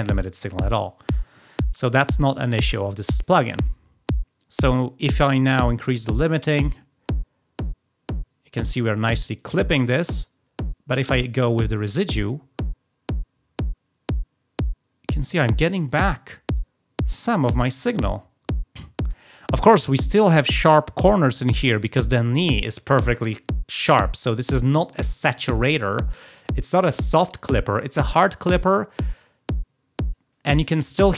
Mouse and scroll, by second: 5.4-9.5 drag, 11.1-15.3 drag, 16.5-19.1 drag, 31.0-31.1 drag.